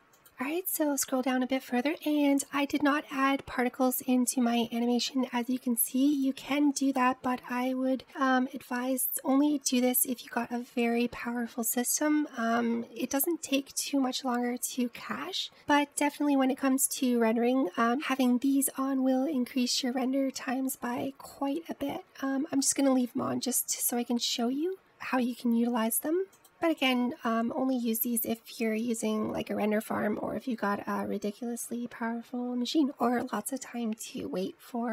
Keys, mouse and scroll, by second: 1.1-2.2 scroll down 7, 2.2-3.4 scroll down 4, 3.4-5.6 drag, 5.6-5.9 scroll down 3, 7.4 click, 8.0 click, 8.9 click, 26.3-27.2 scroll down 6.